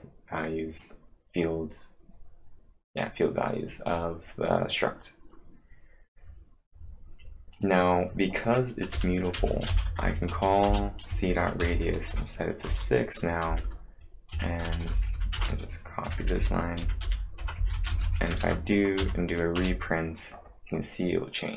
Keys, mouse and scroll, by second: 5.6 scroll down 1, 5.8-6.7 scroll down 2, 7.5 click, 8.7-12.1 typing, 12.7 Return, 13.5-18.5 typing, 19.0 Up, 19.6 Return.